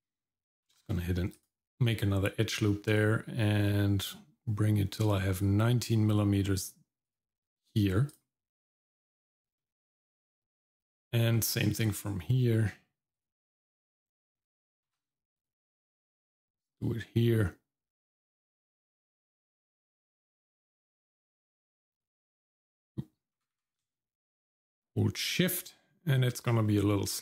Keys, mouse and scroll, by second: 0.7 ctrl+r, 8.1 click, 9.4-9.8 scroll down 1, 9.8 middle click, 10.3-10.9 scroll up 1, 11.3 middle click, 13.1 click, 14.9 ctrl+r, 23.4 g.